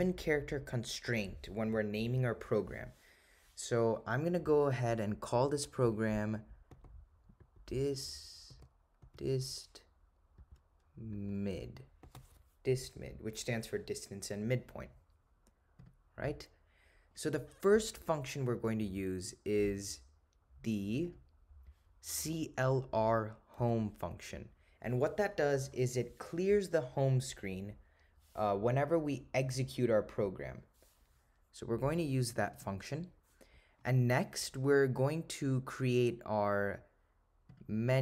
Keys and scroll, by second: 9.1 4, 15.9 Return, 21.1 Right, 23.7 8, 32.7 Return.